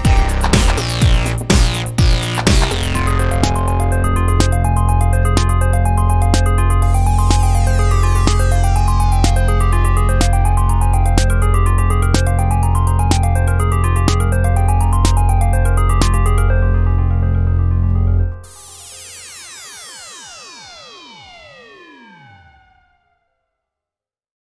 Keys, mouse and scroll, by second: 0.8 click, 4.5 middle click, 4.9-5.9 middle drag, 7.1 a, 8.8 click, 10.6 shift+c, 11.6-13.3 middle drag, 14.6 KP_5, 19.2-23.6 middle drag.